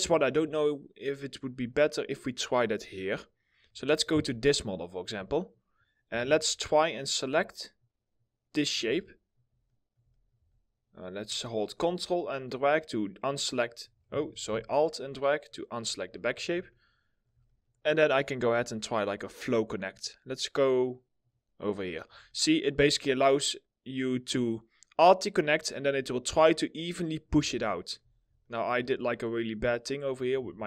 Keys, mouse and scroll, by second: 1.6 middle click, 4.4 alt+middle click, 5.0 middle click, 5.4-5.9 scroll up 1, 5.9 2, 6.4 alt+middle click, 8.7 alt+middle click, 9.8 alt+middle click, 10.2 alt+middle click, 11.1 alt+middle click, 11.9 ctrl+click, 13.9 ctrl+z, 14.3 alt+click, 16.1 scroll up 1, 16.4 alt+middle click, 22.0 alt+middle click, 25.3 middle click, 26.2 alt+middle click, 27.7 scroll, 27.8 alt+middle click, 27.8 scroll up 1, 28.1 alt+middle click, 30.1 ctrl+z.